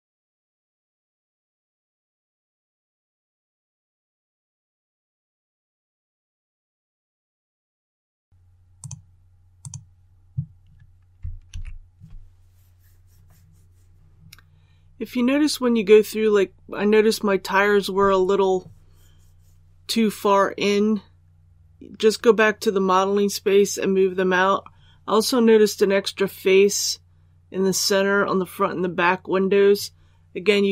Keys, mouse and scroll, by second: 0.7 shift+middle click, 0.8 shift+middle click, 0.9 scroll up 1, 1.0 middle click, 1.4 shift+right click, 1.6 middle click, 1.7 shift+middle click, 2.4 shift+right click, 2.7 middle click, 3.1 shift+right click, 3.4 shift+right click, 3.6-4.1 scroll up 1, 4.1 click, 4.5 click, 4.6 scroll down 1, 4.7 middle click, 4.9 shift+right click, 5.1 scroll up 1, 5.2 shift+middle click, 5.5 click, 5.8 shift+right click, 6.2 shift+right click, 6.3 scroll down 1, 6.5 middle click, 6.7 scroll up 1, 7.0 shift+right click, 7.2 middle click, 7.6 shift+right click, 7.7 scroll down 1, 8.0 middle click, 8.7 click, 11.4 alt+a, 13.9 middle click.